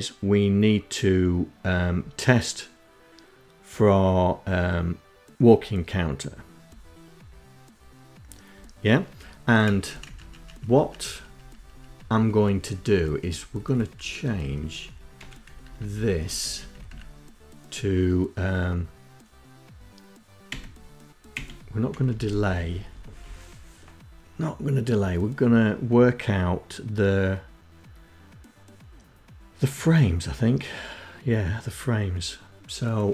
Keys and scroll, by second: 8.6 Up, 8.9 Up, 9.3 Up, 9.5 Up, 9.8 Up, 10.1 Up, 10.4 Up, 10.6 Up, 10.8 Up, 11.0 Up, 11.2 Up, 11.4 Up, 11.6 Up, 11.9 Up, 12.2 Down, 12.4 Down, 13.4 Down, 13.6 Down, 14.1 End, 14.4 Left, 14.6 Left, 14.9 Left, 15.0 Left, 15.2 Left, 15.4 Left, 15.5 Left, 15.7 Left, 19.4 Delete, 20.3 Delete, 21.0 Left, 21.5 Left, 21.7 Left, 21.8 Left, 22.1 Left.